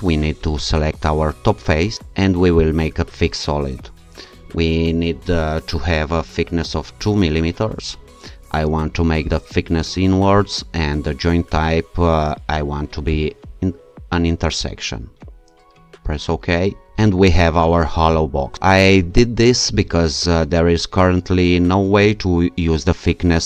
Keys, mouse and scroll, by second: 0.7 click, 2.6 click, 7.0 2, 9.3 click, 11.6 click, 13.1 click, 16.1 click.